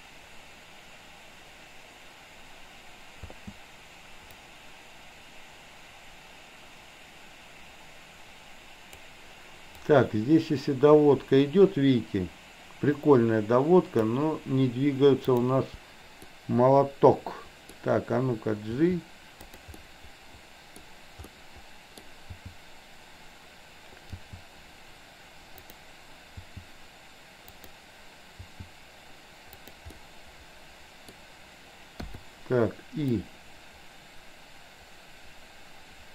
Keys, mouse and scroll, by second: 3.3 space, 4.4-9.1 drag, 9.8-14.1 drag, 15.4 drag, 16.4-17.6 middle drag, 18.8 g, 19.8 click, 21.4-22.0 middle drag, 22.3 g, 24.1 g, 25.5-25.9 drag, 28.4 g, 29.9-31.3 middle drag, 29.9 scroll up 1, 31.1 scroll down 1, 32.1 i, 33.3-36.1 drag.